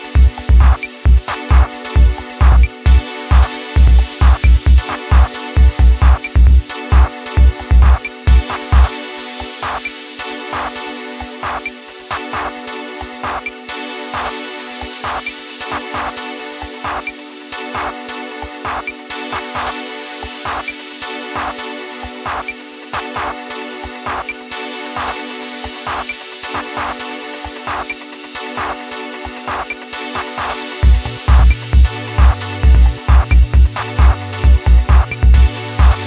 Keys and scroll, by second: 0.0 ctrl+KP_Subtract, 8.7 ctrl+t, 28.4 Return.